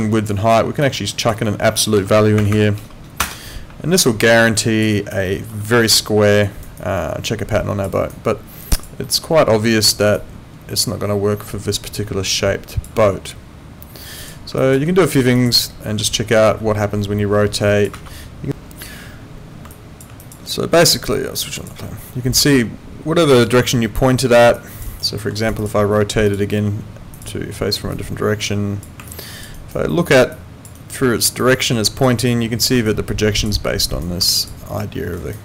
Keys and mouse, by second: 3.2 Return, 3.2 KP_Enter, 4.2 alt+click, 4.9 alt+right click, 5.3 alt+middle click, 6.4 alt+right click, 6.8 alt+click, 7.9 alt+right click, 8.6 alt+click, 9.1 alt+middle click, 10.2 alt+click, 14.2 click, 14.6 alt+click, 17.9 ctrl+z, 19.7 alt+click, 21.6 click, 22.5 alt+click, 23.5 alt+right click, 24.9 alt+right click, 25.2 alt+middle click, 25.4 alt+right click, 25.6 alt+click, 29.1 alt+click, 29.6 alt+right click, 29.9 alt+middle click, 30.3 alt+click, 30.7 alt+right click, 31.4 alt+click, 32.9 alt+click, 33.5 alt+right click, 34.3 alt+click, 34.8 alt+middle click, 35.1 alt+right click.